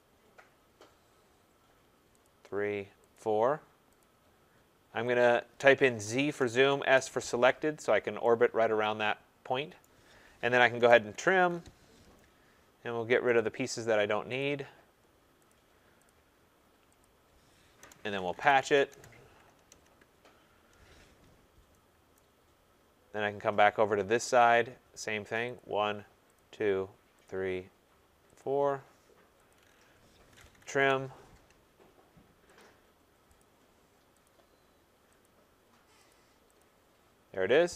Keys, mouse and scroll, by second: 0.1 scroll, 0.8 scroll, 2.2 click, 3.1 click, 4.0 click, 5.2 click, 6.2 z, 6.3 Return, 6.7 s, 6.9 Return, 7.8-8.2 scroll, 9.5 middle click, 9.8 right click, 10.5-11.8 typing, 13.3 click, 13.8 Return, 14.3 click, 15.4 click, 16.0 click, 17.0 click, 17.8 Return, 17.9-19.1 typing, 21.2 scroll, 22.1 Return, 22.1 right click, 22.3-23.0 scroll, 24.3 click, 25.5 click, 26.3 click, 27.2 click, 28.3 click, 29.4 click, 30.0-31.1 typing, 32.5 click, 33.3 click, 34.2 click, 35.2 click, 36.1 click, 36.6 click.